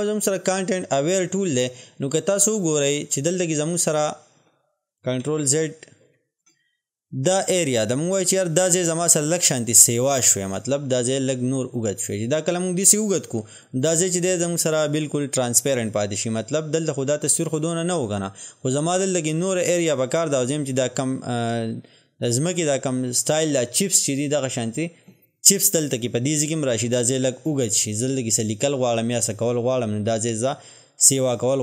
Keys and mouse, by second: 5.5 ctrl+z, 10.6-31.6 drag.